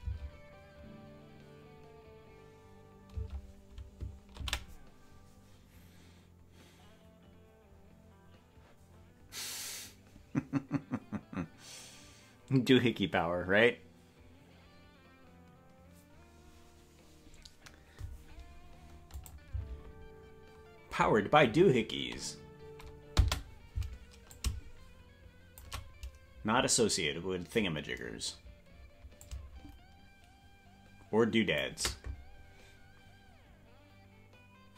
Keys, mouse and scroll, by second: 0.0 space, 3.2 space, 7.8 ctrl+s, 19.2 click, 23.2 space, 24.3-25.6 drag, 29.2-31.6 drag.